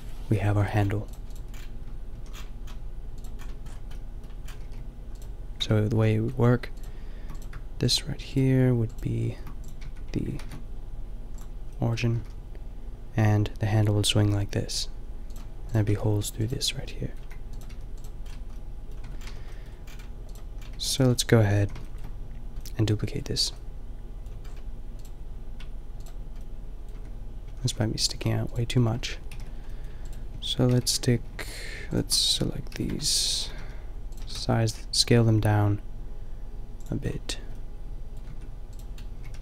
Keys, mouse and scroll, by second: 0.7 KP_5, 1.1-3.1 middle drag, 2.2 a, 3.5-4.2 middle drag, 4.6 r, 5.7 Tab, 6.0 a, 9.4 shift+s, 9.9 Tab, 10.4 ctrl+alt+shift+c, 12.1 r, 15.9 Tab, 17.3 a, 17.8 g, 19.0 Tab, 19.3 a, 20.7 a, 21.6 a, 27.0 Tab, 27.5 a, 27.7 a, 28.1 a, 29.3 ctrl+l, 30.7 ctrl+;, 31.3 ctrl+l, 32.8 ctrl+l, 33.4 s, 34.3 s, 37.1-38.3 drag, 38.3 Tab, 38.7 right click, 39.2 g.